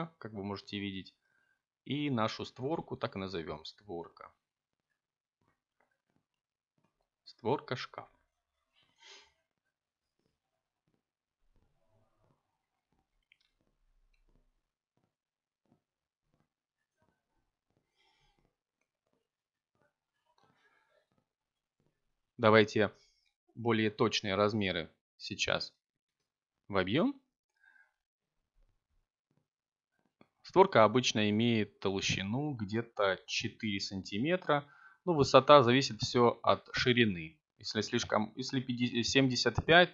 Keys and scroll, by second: 0.0-0.4 typing, 4.3-5.5 typing, 5.8 Return, 16.5 BackSpace, 18.6 3, 19.3 5, 19.9 Return, 31.7 BackSpace, 32.9 3, 33.6 Return.